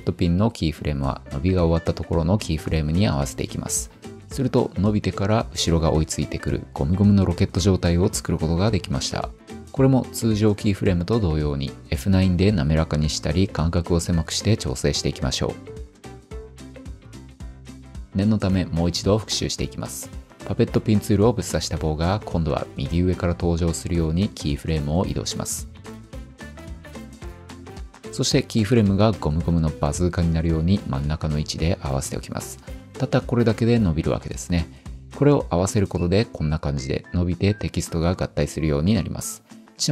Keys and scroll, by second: 39.2 p.